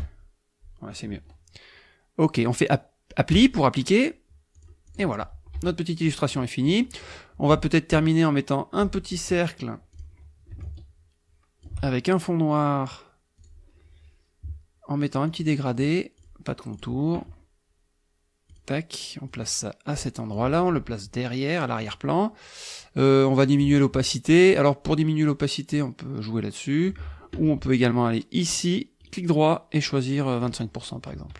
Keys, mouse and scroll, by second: 3.3 click, 4.6 click, 4.9 click, 5.5 KP_Subtract, 6.3 click, 7.0 click, 9.9 click, 10.6-11.8 ctrl+shift+drag, 13.4 click, 15.3 click, 16.2 click, 16.7 click, 18.5 click, 19.3-20.5 drag, 21.8 click, 25.7-27.1 drag, 29.0 click, 30.4 click.